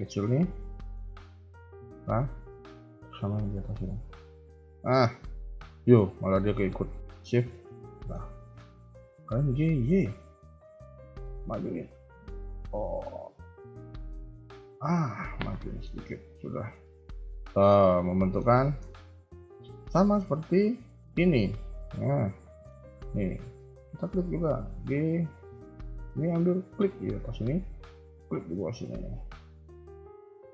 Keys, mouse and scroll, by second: 0.2 scroll down 1, 0.4 scroll down 2, 0.5 shift+middle click, 1.7 shift+middle click, 4.5 ctrl+click, 7.3 shift+click, 7.9 shift+middle click, 8.2 scroll up 1, 9.0 g, 14.8 KP_1, 15.1 scroll down 2, 15.4 middle click, 16.0 KP_3, 16.2 KP_1, 16.5 Tab, 16.8 middle click, 17.7 scroll up 2, 17.9 middle click, 18.5 KP_1, 18.8 Tab, 19.6 KP_3, 19.9 scroll down 2, 20.2 shift+middle click, 21.7 middle click, 23.8 click, 25.8 a, 26.0 a, 26.6 click, 28.2 ctrl+click, 28.6 KP_3, 29.0 scroll up 2, 29.9-30.5 scroll down 1.